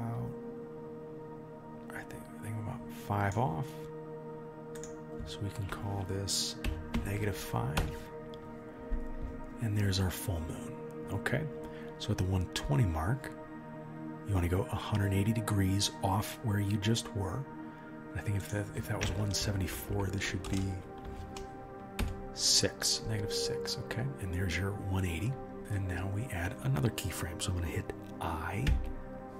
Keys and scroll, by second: 20.6 BackSpace.